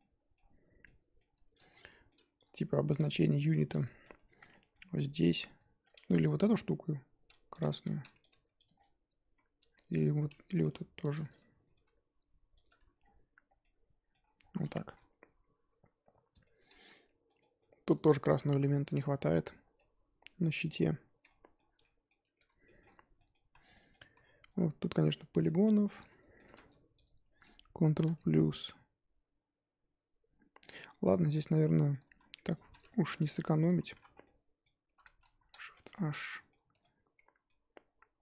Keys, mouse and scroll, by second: 2.4 click, 2.7-3.2 shift+middle drag, 3.2-3.6 scroll up 2, 3.7-4.0 shift+middle drag, 4.0 Tab, 4.5-5.3 middle drag, 5.3 click, 6.4 l, 7.5 click, 7.7 g, 8.2 Tab, 8.6 click, 8.7-9.3 scroll down 3, 9.3 scroll up 4, 9.6 Tab, 9.9 click, 10.6 l, 11.6 Left, 11.7 g, 12.6 Tab, 12.9-13.6 scroll down 4, 13.6-14.4 middle drag, 14.4-14.7 scroll down 3, 14.7 shift+middle drag, 14.9 scroll up 2, 15.6-16.4 scroll up 2, 16.4-17.6 shift+middle drag, 17.6 scroll up 2, 17.9 click, 18.4-19.1 middle drag, 19.1 scroll down 4, 19.7-20.7 middle drag, 20.7-21.2 scroll up 2, 21.2-21.6 middle drag, 21.6 scroll up 2, 21.8-22.2 middle drag, 22.2 Tab, 22.6 shift+middle drag, 22.8-23.1 scroll up 3, 23.1 middle click, 23.4 z, 23.7-24.1 middle drag, 24.1 z, 24.5 z, 25.4-26.4 middle drag, 26.4 3, 27.0 alt+click, 27.9 ctrl+KP_Add, 28.6-31.2 middle drag, 31.2-31.7 scroll up 1, 31.7-32.1 middle drag, 32.1 z, 32.6 z, 32.8-33.2 shift+middle drag, 33.2 click, 33.9 l, 34.1 scroll down 2, 34.2-34.8 middle drag, 34.8 l, 35.7 shift+h, 35.9-36.7 middle drag, 36.7 1, 37.4-38.2 middle drag.